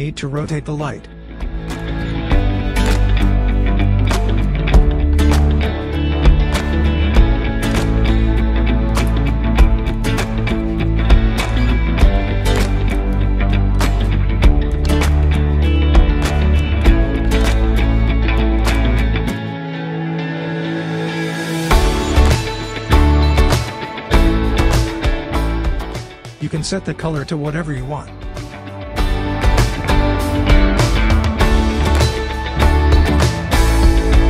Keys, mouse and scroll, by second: 3.5-5.3 drag, 11.5 scroll down 1, 11.9 scroll up 1, 12.9 click, 15.1-15.6 scroll down 1, 15.6-17.0 scroll up 1, 17.6-18.8 drag, 19.2-20.8 scroll down 1, 20.8-22.9 drag, 27.8-29.7 scroll up 1, 30.5 click, 33.2-33.7 scroll down 1.